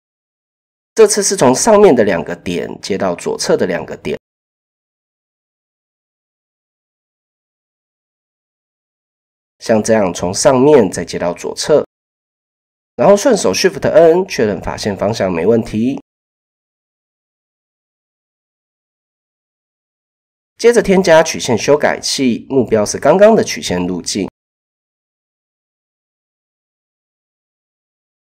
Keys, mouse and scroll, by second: 1.0 middle click, 1.2 typing, 2.7 middle click, 5.1 click, 6.9 click, 8.2 middle click, 11.1 click, 11.7 KP_7, 12.6 a, 13.6 shift+n, 14.8 Tab, 16.7 shift+middle drag, 17.0 typing, 18.0-18.5 shift+middle drag, 21.6 middle click, 23.6-24.0 shift+drag, 24.6-25.2 shift+drag.